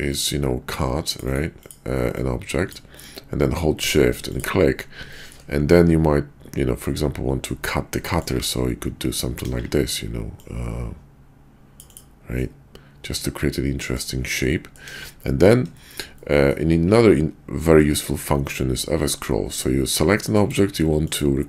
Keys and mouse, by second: 0.1 click, 0.7-1.7 drag, 2.2-3.8 drag, 3.8 shift+middle click, 5.1 shift+middle drag, 5.7-7.5 middle drag, 8.1 middle click, 9.4 KP_5, 10.4-12.0 drag, 12.4-14.0 middle drag, 14.4-14.8 drag, 14.9 KP_5, 15.8 shift+middle click, 16.1-16.5 drag, 21.0 click.